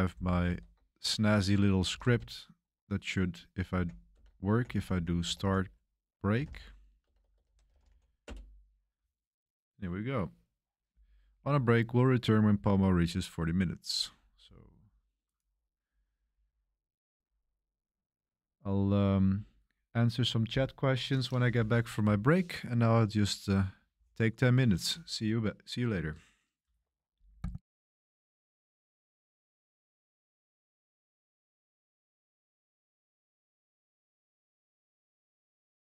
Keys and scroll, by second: 0.0 ctrl+alt+shift+1, 0.4 super+3, 0.4 ctrl+alt+shift+1, 1.8 ctrl+b, 2.0 c, 3.6-8.5 typing, 8.5 Return.